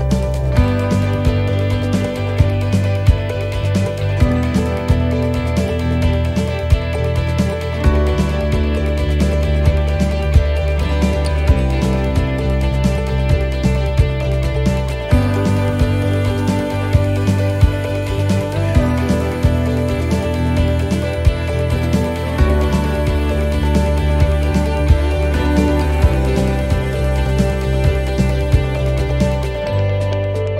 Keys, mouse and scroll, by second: 1.5 right click, 2.6 click, 3.7-4.1 scroll up 3, 4.1 middle click, 6.7 click, 7.8 right click, 9.3 shift+right click, 9.7 middle click, 11.4 right click, 12.5 shift+right click, 12.9 middle click, 13.6 shift+middle click, 15.2 shift+right click, 15.8 shift+right click, 17.0 shift+right click, 17.4 shift+right click, 18.4 shift+right click, 19.0 shift+right click, 20.3 shift+middle click, 20.9-21.4 scroll up 5, 21.4 middle click, 22.1 shift+middle click, 24.0 shift+right click, 24.6 shift+right click, 25.1 shift+right click, 25.6 shift+right click, 26.4 middle click, 28.8 shift+right click, 29.2 shift+right click, 29.7 shift+right click, 30.0 shift+right click.